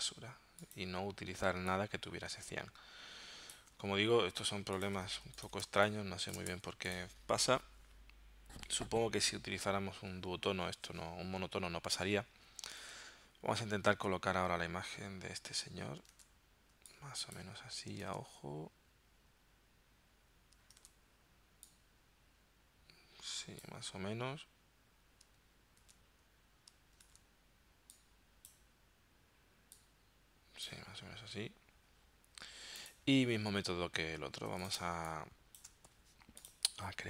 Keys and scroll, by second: 1.5 space, 5.1 z, 5.7 space, 6.6 v, 12.8 super+Tab, 16.1 super+Tab, 18.1 super+Tab, 20.8 super+Tab, 25.9 super+Tab, 27.1 super+Tab, 34.6 z, 34.8 space, 35.9 v.